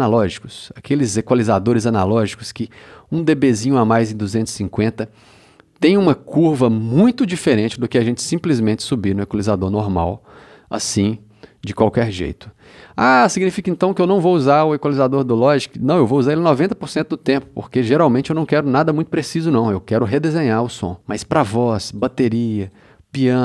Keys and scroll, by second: 8.7 c, 16.1 c.